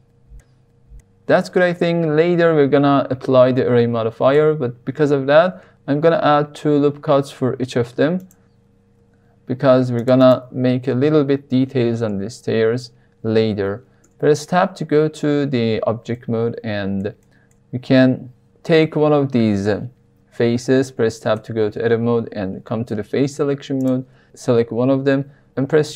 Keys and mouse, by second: 0.8-1.3 middle drag, 1.5 middle click, 4.3 Tab, 5.2 ctrl+r, 6.6 right click, 7.4 ctrl+r, 8.2 right click, 8.9 ctrl+r, 10.2 right click, 10.9 ctrl+r, 12.2 click, 14.0 Tab, 16.1-17.0 middle drag, 17.2 shift+middle click, 18.7 Tab, 21.1 Tab, 21.3 Tab, 22.5 3, 23.7 click.